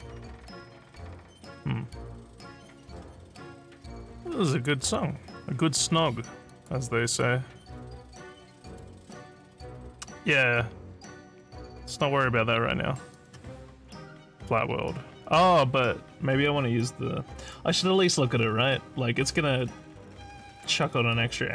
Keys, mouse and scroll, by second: 6.5 click, 8.7 click, 13.1 click, 20.2 click, 20.8 click.